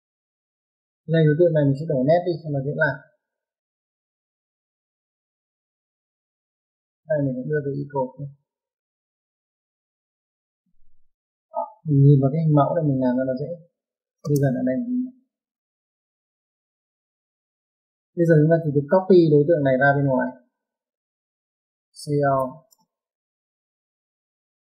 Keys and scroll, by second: 2.8 Escape, 5.9 Escape, 10.4 Escape, 14.2 typing, 22.1-22.9 typing.